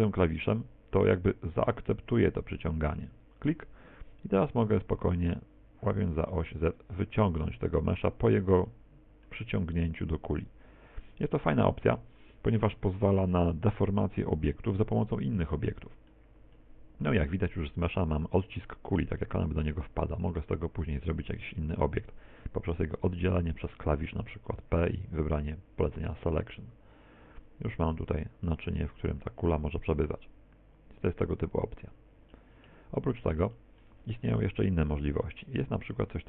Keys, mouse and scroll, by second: 6.8 click, 20.3 Tab, 24.7 p, 26.4 right click, 27.3 r, 31.3 click, 32.3 middle click, 33.1-33.5 scroll down 3, 33.5 shift+middle click.